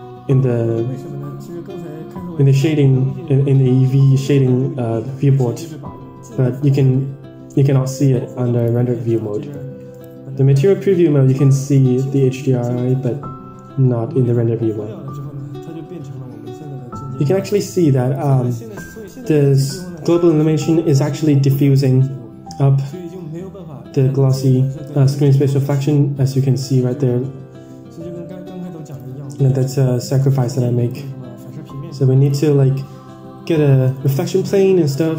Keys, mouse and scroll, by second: 8.4 click, 9.1-9.4 middle drag, 9.9-17.4 shift+drag, 17.7 click, 18.0-19.9 drag, 27.5-27.9 scroll down 4, 27.9-28.6 scroll up 5, 29.1 shift+a, 33.9 click, 34.3 middle click, 34.4-35.1 scroll down 12.